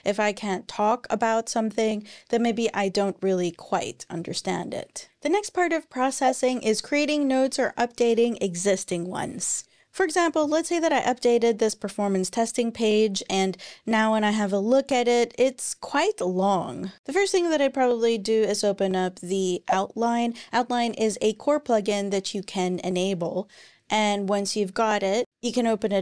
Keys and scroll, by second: 25.4 super+p.